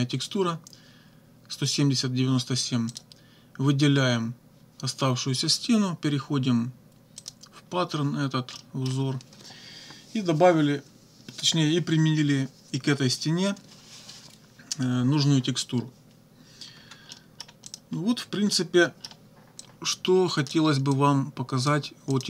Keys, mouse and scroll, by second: 2.9 click, 7.2 click, 8.5 click, 16.7 -, 17.1 middle click, 17.7 click, 18.2 -, 18.5 middle click, 19.6-20.7 drag, 20.9 click, 22.1 click.